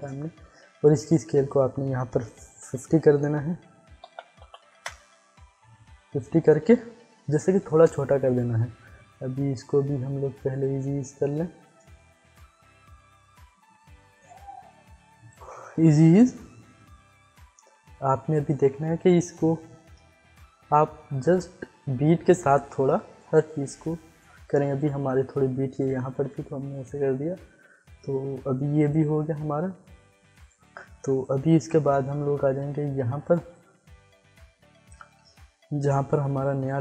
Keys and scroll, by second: 4.0 5, 4.7 Return.